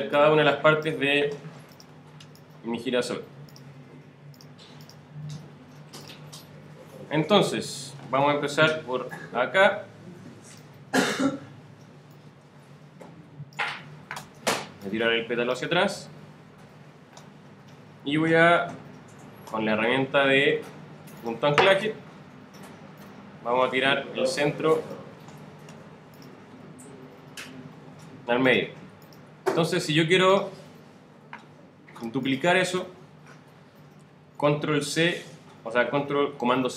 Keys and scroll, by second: 34.8 super+c.